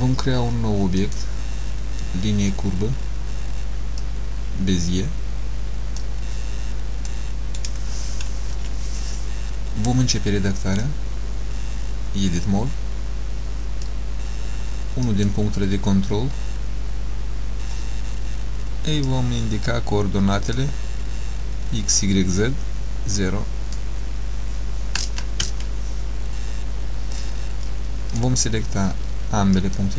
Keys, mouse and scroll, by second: 1.1 click, 4.1 click, 7.2 middle click, 8.7 KP_Decimal, 10.9 click, 15.1 click, 19.1 click, 23.3 click, 29.6 shift+click.